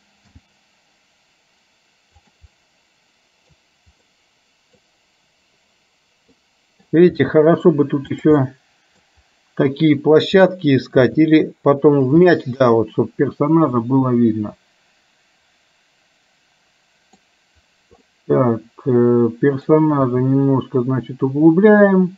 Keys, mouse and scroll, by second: 0.4 g, 2.6-3.7 middle drag, 4.1 middle click, 6.5 middle click, 7.2 g, 8.5 middle click, 10.6 middle click, 11.1 g, 12.4-17.2 middle drag, 18.1-19.9 middle drag, 20.1 g.